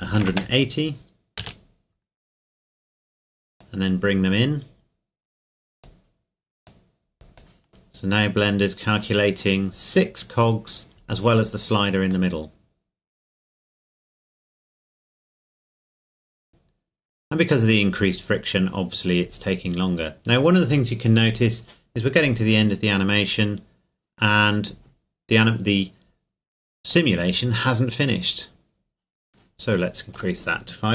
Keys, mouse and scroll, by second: 0.1 KP_1, 0.2 KP_8, 0.3 KP_0, 1.4 KP_Enter, 2.1 scroll up 1, 3.6 click, 10.1 scroll down 1, 12.3 middle click, 13.5 scroll up 1, 14.4 scroll down 1, 17.3 scroll up 1, 19.1 scroll down 1, 26.9 click, 30.1 click.